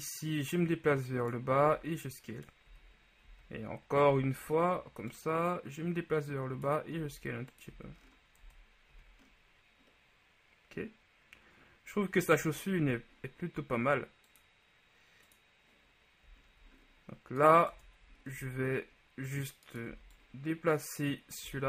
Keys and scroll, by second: 1.9 s, 3.4 z, 4.1 e, 7.9 z, 8.5 Tab, 9.1 a, 12.5 KP_1, 17.8 Tab, 18.5 shift+z, 20.0 b.